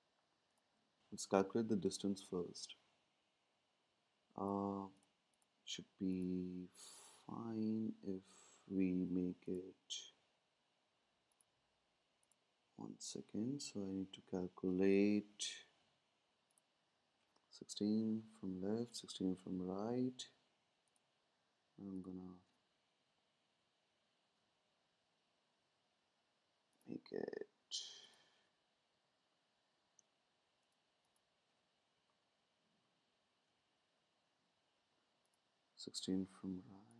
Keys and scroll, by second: 15.3 Right, 18.2 Left, 18.4 Left, 23.0 shift+Down, 28.9 shift+Down.